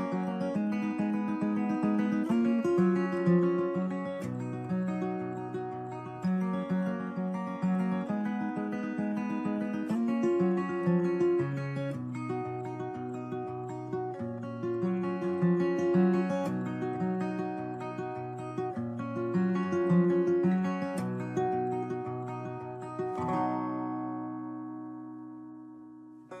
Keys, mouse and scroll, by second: 1.9 shift+a, 7.8 shift+a, 11.8 shift+a, 18.1 right click, 18.9 right click, 19.6 shift+a, 20.8 shift+a, 22.3-22.7 right drag, 23.7 right click, 25.8-26.4 right drag.